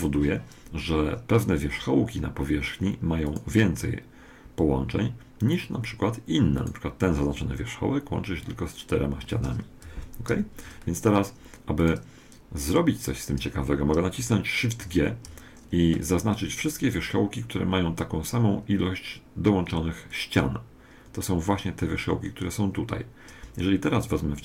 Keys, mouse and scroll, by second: 3.3-4.3 middle drag, 4.3 right click, 7.3-8.3 right drag, 7.6-9.4 middle drag, 10.3 ctrl+,, 11.8-13.4 right drag, 12.6 click, 13.5 click, 13.5 right click, 13.8 click, 13.9 click, 14.8 shift+g.